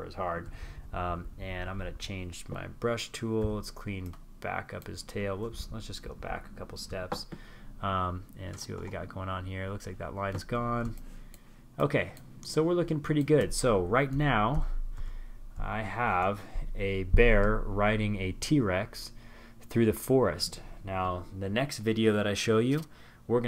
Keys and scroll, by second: 3.4 super+z, 4.1 alt+super+z, 12.4 super+-, 12.8 super+-, 13.5 super+-.